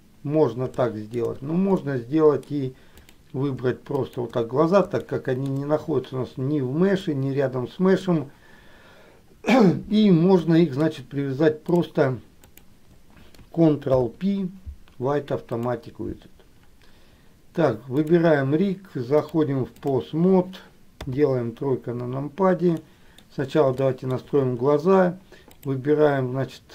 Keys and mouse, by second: 1.0 shift+middle click, 2.0 middle click, 3.1 click, 4.3 shift+click, 5.2 shift+middle click, 7.1-8.2 middle drag, 10.5 shift+middle click, 12.7 shift+click, 14.2 ctrl+p, 18.3 click, 19.4 click, 21.1 KP_3, 23.0 middle click, 24.0 shift+middle click, 25.8 click.